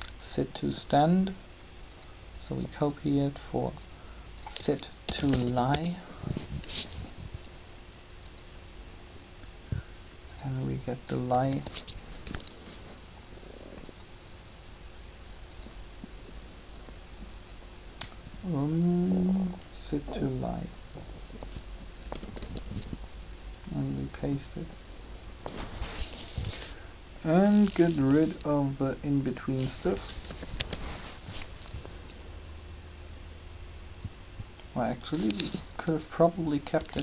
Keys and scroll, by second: 5.0-5.4 typing, 5.5 Return, 11.3 typing, 22.0 Up, 27.9 b, 30.2 Delete, 30.3 Return, 36.8 ctrl+z.